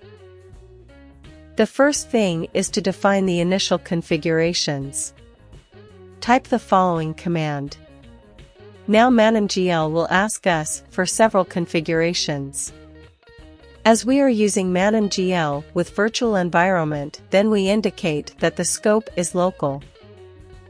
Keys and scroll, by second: 1.4-6.4 typing, 18.8-20.3 typing.